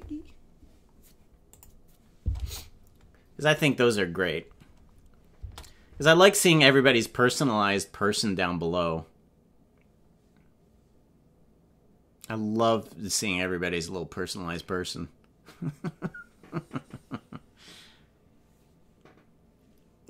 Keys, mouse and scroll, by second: 1.5 click, 2.3 space, 5.4 space.